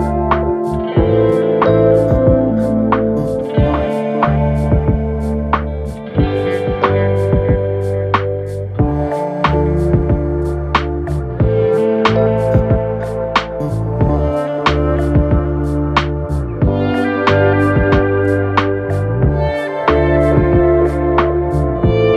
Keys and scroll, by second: 0.8 ], 5.4 4, 5.5 F3, 6.9 F1, 9.3 F2, 16.9 ctrl+z, 20.1 3, 20.6 ].